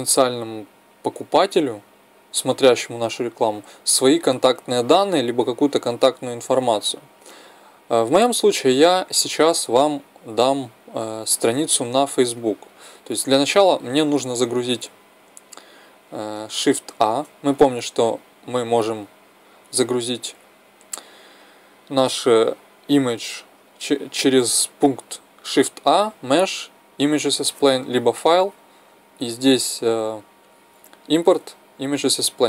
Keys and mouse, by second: 17.0 shift+a, 28.1 click.